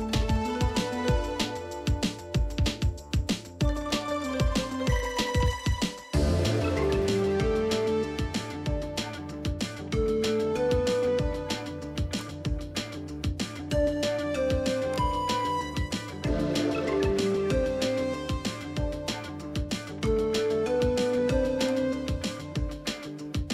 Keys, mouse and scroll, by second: 0.6 ctrl+o, 3.8 scroll down 1, 4.5 scroll down 1, 5.5 scroll down 1, 6.8 scroll up 1, 16.4 ctrl+a, 18.9 ctrl+c.